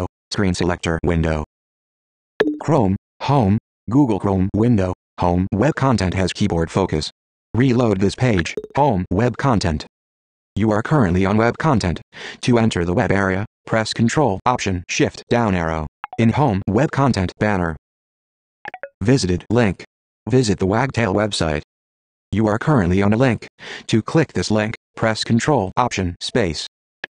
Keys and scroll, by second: 7.1 super+r.